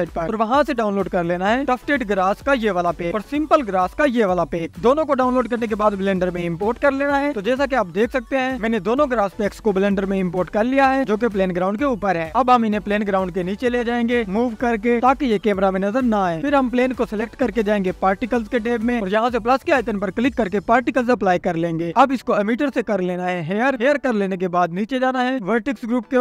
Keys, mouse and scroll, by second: 10.6-11.7 scroll up 1, 11.7 click, 12.4-13.9 scroll down 2, 13.9 click, 16.3 click, 17.6 click, 17.6-18.1 scroll down 1, 18.1 click, 21.6-24.0 drag, 25.6-26.2 scroll down 5.